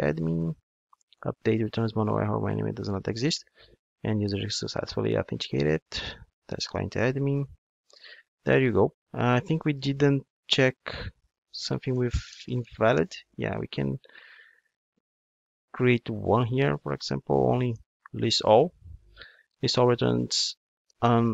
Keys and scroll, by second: 3.5 super+v, 6.6 Return, 11.1 super+c, 11.4 super+f, 16.6 super+c, 17.3 Tab.